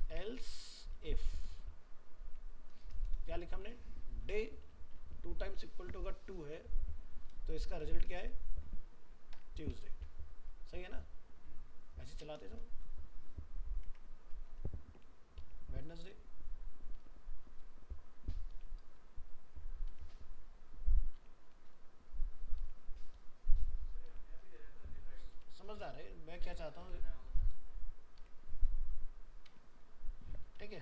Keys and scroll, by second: 9.9 ctrl+s, 30.7 ctrl+s.